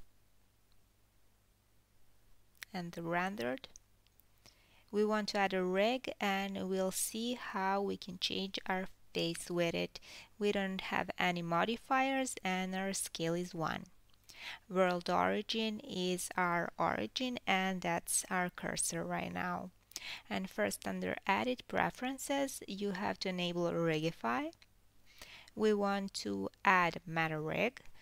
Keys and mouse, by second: 0.7 F12, 6.7-11.6 middle drag, 10.4 KP_1, 15.4 KP_1, 15.9-19.5 ctrl+middle drag, 19.5-28.0 drag.